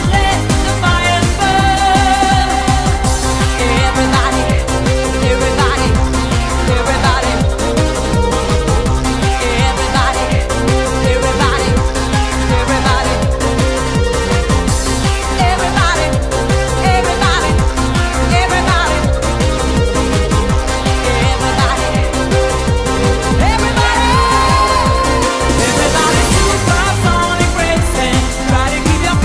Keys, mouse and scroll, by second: 13.7 click, 20.1 click.